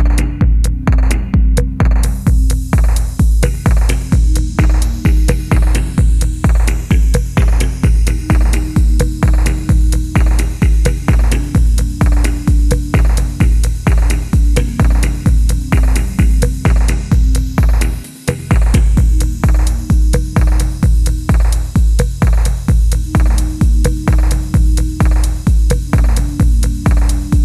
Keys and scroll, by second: 0.0 typing, 2.4 typing, 3.5-5.1 typing, 5.1 Right, 5.2 Right, 5.3 Right, 5.7 Right, 6.0 Right, 6.0 Return, 7.3-9.8 typing, 7.4 Right, 7.5 Right, 8.8 Right, 8.8 Right, 9.1 Escape, 9.8 Right, 9.9 Right, 10.0 Right, 10.4 Return, 12.0 w, 12.0 s, 13.3 ctrl+z, 13.4 ctrl+z, 17.7 3, 19.8 d, 20.1 ctrl+z, 20.4 d, 23.0-24.5 typing, 24.0 Escape, 24.2 ctrl+z, 27.2 ctrl+c, 27.3 ctrl+c.